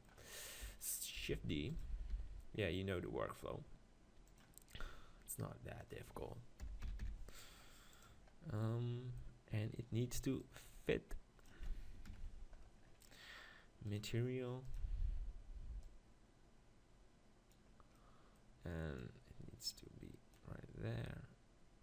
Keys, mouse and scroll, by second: 0.6 KP_7, 1.4 shift+d, 1.8-3.7 drag, 2.1 r, 4.9-7.5 middle drag, 5.8-7.7 drag, 8.6-10.4 middle drag, 10.4-12.1 drag, 12.9-13.9 middle drag, 13.9-15.7 drag, 15.9-17.7 drag, 18.0-19.0 middle drag, 19.0-20.8 drag.